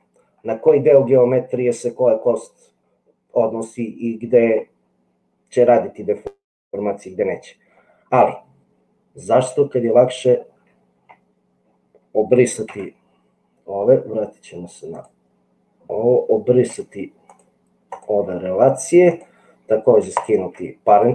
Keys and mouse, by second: 12.8 Tab, 14.9 click.